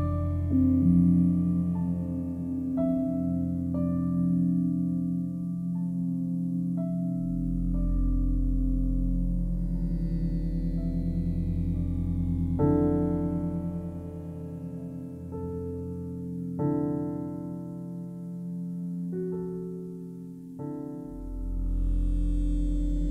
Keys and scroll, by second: 7.3 7, 8.7 Return, 17.3 5, 17.9 Return.